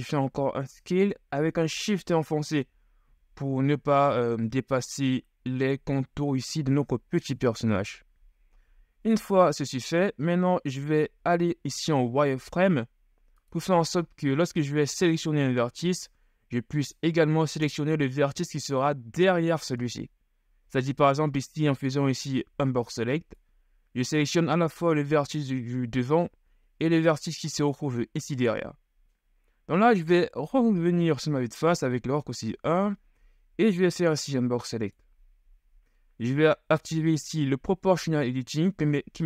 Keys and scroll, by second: 12.2 z, 22.7 b, 30.5 KP_1, 33.9 b.